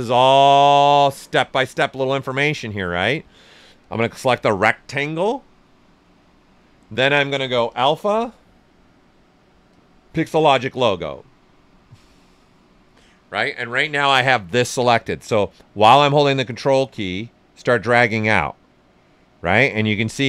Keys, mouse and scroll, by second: 3.8 ctrl+click, 7.7 ctrl+click, 17.1-20.2 ctrl+drag.